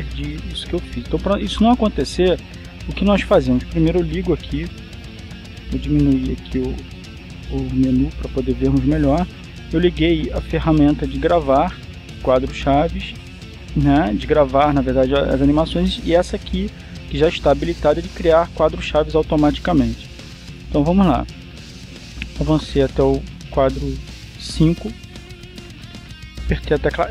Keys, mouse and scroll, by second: 5.1 click, 7.7 click, 21.6-24.4 drag.